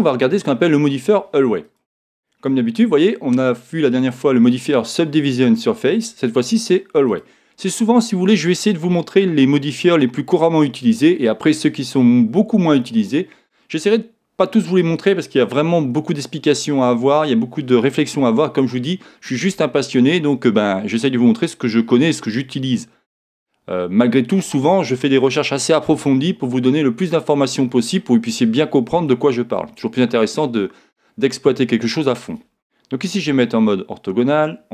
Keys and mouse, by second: 1.6 click, 33.4 KP_1.